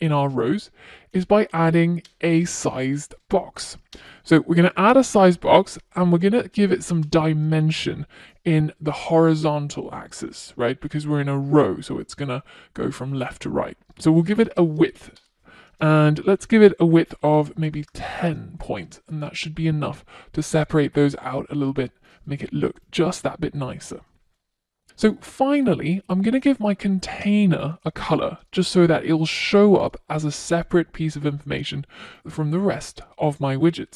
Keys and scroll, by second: 3.2 Return, 6.3 Return, 14.4 Return, 17.0 Return, 17.5 super+s, 27.6 Return, 29.9 Return.